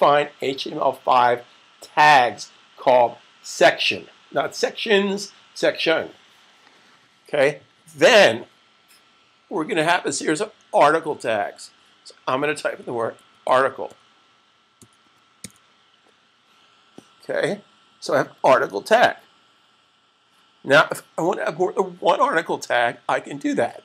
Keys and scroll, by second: 12.4-15.7 typing.